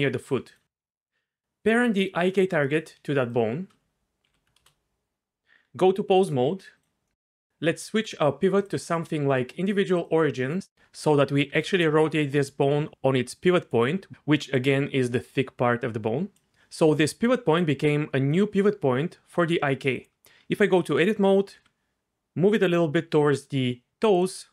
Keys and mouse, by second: 0.5 click, 4.2 ctrl+p, 5.6 Tab, 8.6-10.1 drag, 10.7 r, 11.5 r, 14.1-16.4 d, 16.7 r, 16.9 r, 19.9 right click, 20.4 Tab, 21.5 g, 24.4 Tab.